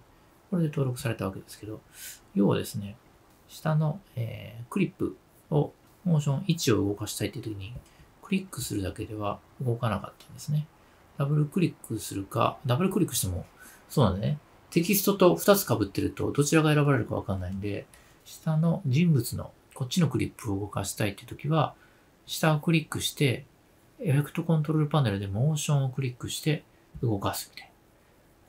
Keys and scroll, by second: 3.2 super+z.